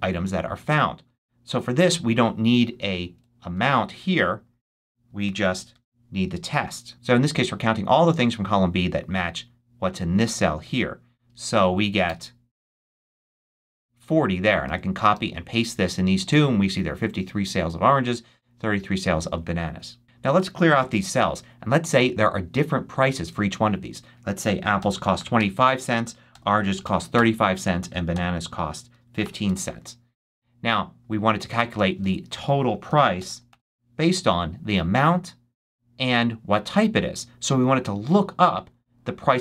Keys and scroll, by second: 3.0 BackSpace, 4.9-6.1 typing, 12.0 Return, 14.6 super+c, 15.0 super+v, 20.7 BackSpace, 24.5-29.1 typing, 29.3 Return, 31.9 super+a, 32.6 shift+super+a, 32.7-33.9 typing.